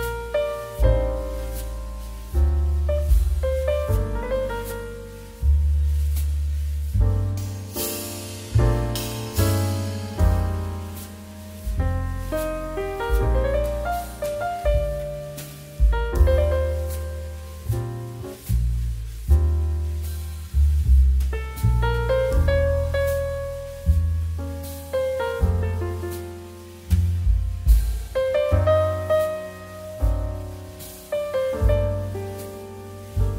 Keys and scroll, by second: 1.0 z, 3.5 z, 9.7 x, 11.1 z, 17.9 x, 18.4 z, 19.3 c, 21.2 x, 30.0 x.